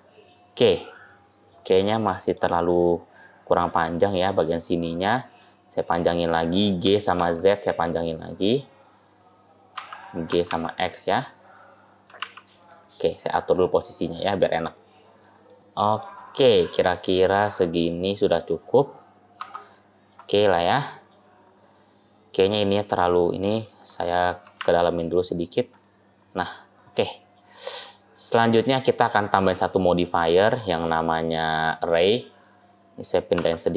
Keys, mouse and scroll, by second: 0.5-1.0 scroll up 1, 1.0 middle click, 1.7 middle click, 2.5 click, 3.5 click, 4.0 middle click, 5.2 click, 5.6 middle click, 6.7 g, 9.6 a, 10.1 g, 11.9 g, 15.3 middle click, 16.0 click, 16.4 middle click, 17.1 click, 17.8 middle click, 19.2 Tab, 19.6 middle click, 20.3 scroll down 1, 20.6 middle click, 21.2-21.6 scroll down 1, 21.6 middle click, 21.6-22.6 scroll up 3, 22.7 click, 23.7 click, 24.3 g, 26.0 click, 26.4 middle click, 27.5 scroll down 1, 27.7 middle click, 28.8 middle click, 30.2 shift+middle click, 31.0 middle click, 32.3 click, 33.2 g.